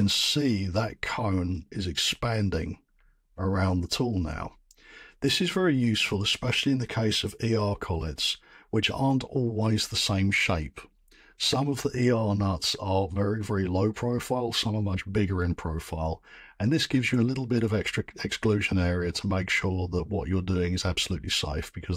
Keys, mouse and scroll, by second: 1.5-2.8 scroll.